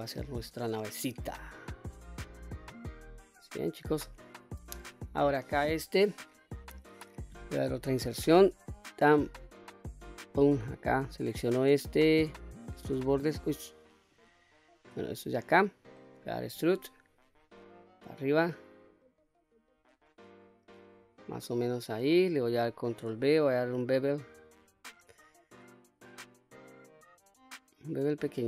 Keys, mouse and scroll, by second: 0.6 middle click, 1.4-2.0 scroll up 2, 2.0 scroll up 1, 2.1-2.7 scroll down 2, 2.7 middle click, 3.7-4.1 scroll up 2, 4.1 middle click, 5.4 click, 7.7 i, 10.2 click, 11.3 click, 12.7 alt+click, 14.2 alt+click, 15.4-16.0 middle drag, 16.6 e, 21.3 click, 23.1 ctrl+b.